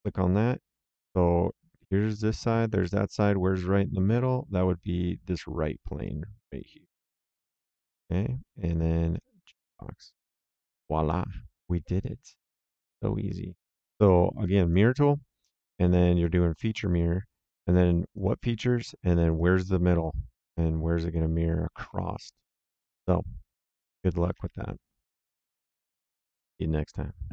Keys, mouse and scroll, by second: 2.9 right click, 6.0 right click, 7.3 click, 9.1 click, 9.6 right click, 11.6 middle click, 12.9 middle click, 14.6 click, 16.1 click, 18.1 click, 19.2 click, 22.9 click, 23.6 middle click.